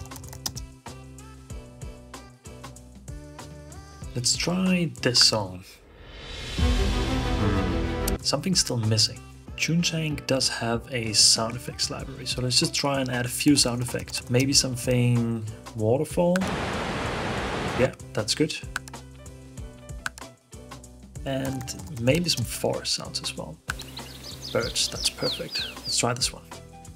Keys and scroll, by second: 0.0-0.6 typing, 13.3-15.5 typing, 14.9 Return, 21.1-22.3 typing.